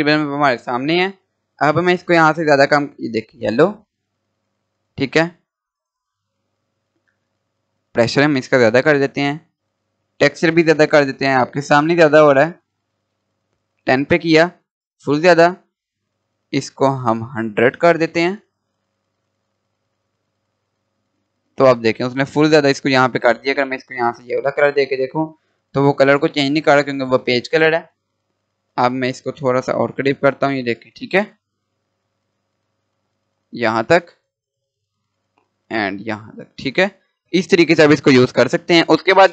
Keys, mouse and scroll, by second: 5.0 click, 12.5 click, 13.0 click, 16.8 click, 20.2 click, 23.3 click, 28.0 scroll up 1, 28.7 scroll down 1, 29.4 scroll up 1, 31.3 scroll down 1, 32.4-34.2 drag, 34.2-34.7 scroll up 1, 35.6-39.2 drag, 39.2 click.